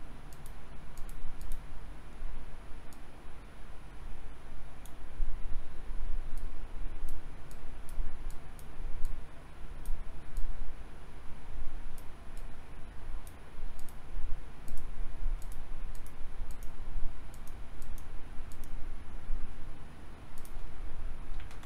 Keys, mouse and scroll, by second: 21.4 KP_2, 21.5 KP_4.